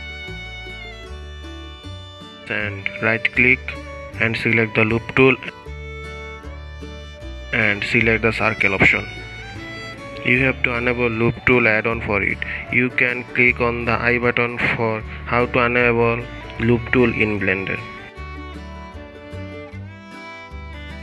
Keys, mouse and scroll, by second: 3.7-7.4 right drag, 7.4-8.4 middle drag, 8.4 ctrl+z, 9.2-15.6 right drag, 15.6 drag, 16.5-20.6 drag.